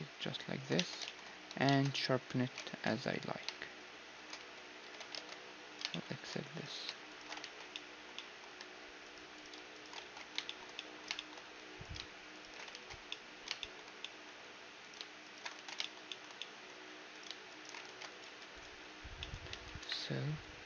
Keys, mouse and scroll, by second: 0.7 Tab, 1.0-4.2 middle drag, 1.4 a, 2.7 ctrl+b, 4.4 Tab, 4.8 Tab, 5.9 middle click, 6.5-11.6 right drag, 7.4 ctrl+x, 10.0 ctrl+x, 11.6 middle click, 11.8-13.1 right drag, 12.7 ctrl+x, 13.1-20.6 middle drag, 14.8-16.1 drag, 15.5 ctrl+x, 17.8 ctrl+x, 18.1-20.4 drag, 18.1-19.5 right drag, 18.4 ctrl+s, 19.5 Tab, 19.8 KP_1.